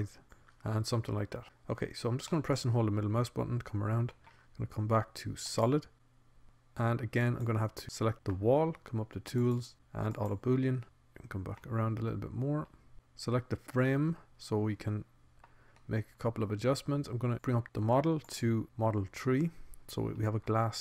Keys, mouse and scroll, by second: 1.9 middle click, 2.5 middle click, 4.1 middle click, 4.6 middle click, 4.9 click, 5.4 click, 5.6 click, 5.9 z, 7.9-9.1 drag, 9.1-10.5 middle drag, 10.7 click, 10.9-12.3 middle drag, 12.3 click, 12.3 middle click, 13.9 click, 15.7-18.1 middle drag, 20.5-20.8 middle drag.